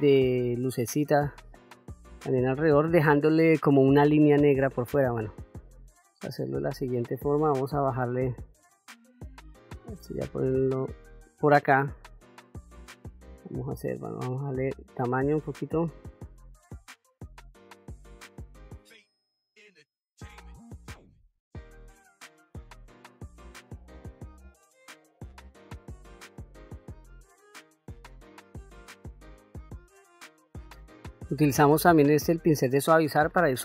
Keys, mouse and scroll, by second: 12.4-13.4 drag, 14.0 f, 15.3 middle click, 16.2 middle click, 16.9-18.7 drag, 19.5 click, 20.1 middle click, 20.2 click, 21.2-22.6 drag, 22.7 middle click, 22.9-24.3 drag, 24.4 middle click, 24.5 middle click, 24.7 middle click, 25.0 click, 25.8 middle click, 25.9-27.7 drag, 27.8 middle click, 28.0 click, 28.8 middle click, 29.1 middle click, 29.3 click, 31.3 click, 32.7 ctrl+middle click.